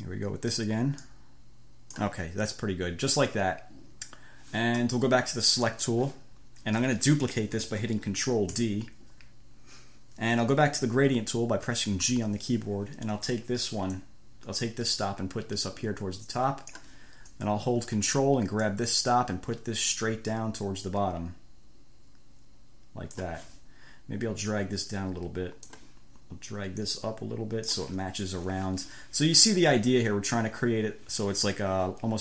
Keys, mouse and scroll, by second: 1.2-2.4 drag, 5.9 click, 8.8 ctrl+d, 12.3 g, 14.2-17.2 drag, 18.9-19.7 ctrl+scroll up 1, 19.7-20.7 ctrl+scroll up 1, 20.7-22.1 ctrl+scroll up 1, 22.1-23.3 ctrl+scroll up 1, 23.3-23.7 ctrl+scroll up 1, 24.7-25.7 scroll up 1, 25.7 click, 27.1-28.1 scroll up 1, 28.1 scroll up 1.